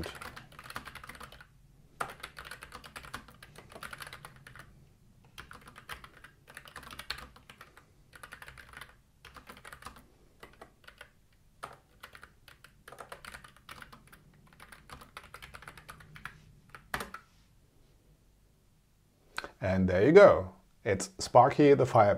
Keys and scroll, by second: 0.4 space, 2.1 BackSpace, 2.7 space, 3.0 r, 3.3 space, 4.4 e, 5.5 space, 6.7 r, 6.7 space, 8.7 s, 9.3 space, 9.7 e, 9.8 space, 10.9-14.9 typing, 16.1 ., 16.9 super+Return.